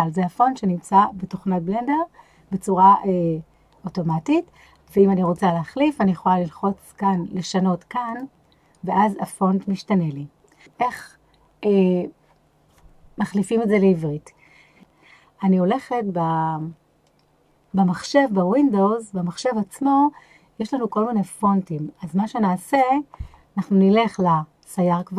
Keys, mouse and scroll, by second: 5.2 click.